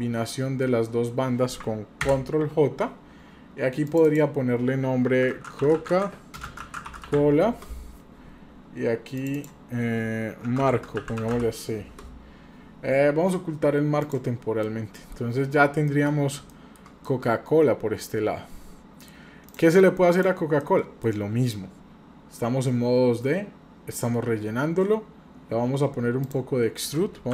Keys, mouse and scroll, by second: 2.1 ctrl+j, 3.8 click, 4.1-8.1 drag, 9.2 click, 9.3-12.7 drag, 14.0 click, 14.6-15.2 middle drag, 15.2-15.9 scroll up 2, 15.9 middle click, 16.5-16.8 shift+middle drag, 17.0-19.1 middle drag, 19.5 click, 20.1 click, 20.6-21.0 middle drag, 21.1-21.7 scroll up 1, 26.2-27.3 drag.